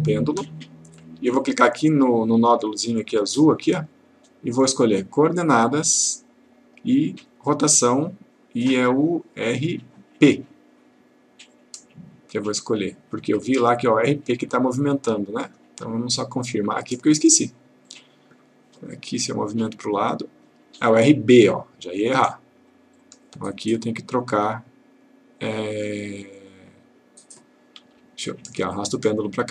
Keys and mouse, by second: 3.7 click, 11.5 click, 14.9-15.9 drag, 20.1-21.0 click, 23.0 click, 26.5-27.5 click, 28.0 Delete, 29.0-29.5 click.